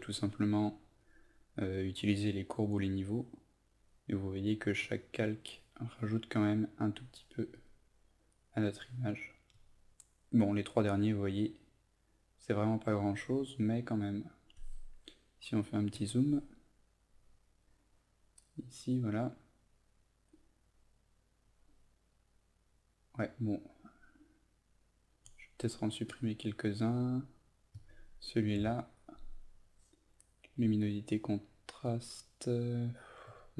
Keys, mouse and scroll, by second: 28.5 Delete.